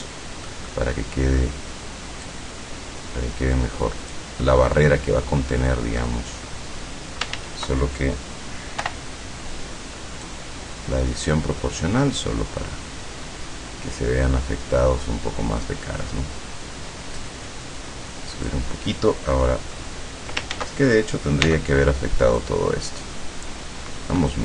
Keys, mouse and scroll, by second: 2.4-4.4 drag, 5.6 middle click, 7.4 ctrl+z, 8.9 o, 10.3-11.7 drag, 11.7-12.1 scroll up 1, 13.4-14.0 scroll up 1, 20.6 ctrl+z, 21.5 c, 22.4-24.4 drag.